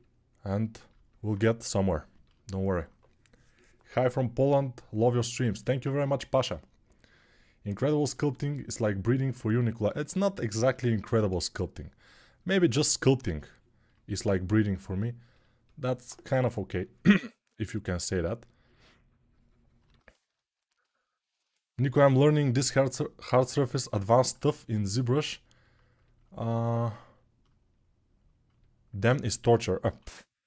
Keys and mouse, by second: 25.4-28.7 ctrl+alt+shift+right drag, 29.6 3.